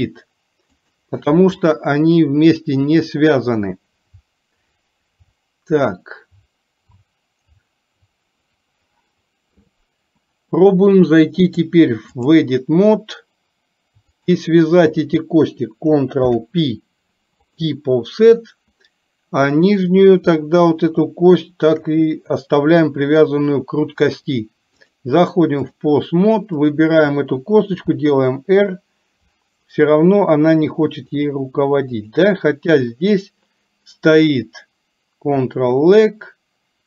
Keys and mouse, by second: 11.5 click, 14.2 shift+click, 16.3 ctrl+p, 19.8 click, 23.0 click, 24.9-25.9 drag, 27.8 r, 32.0 click.